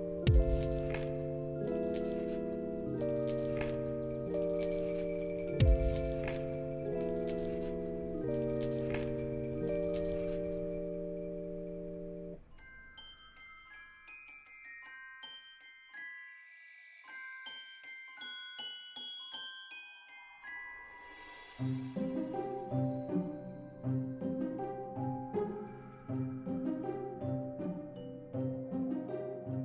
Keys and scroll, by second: 0.0 Return, 2.2 alt+x, 6.9 ctrl+c, 8.1 ctrl+v, 9.5 alt+x, 12.1 ctrl+c, 13.3 ctrl+v, 14.7 ctrl+v, 16.3 alt+x, 20.1 ctrl+c, 21.0 ctrl+v, 28.9 ctrl+c, 29.1 ctrl+v.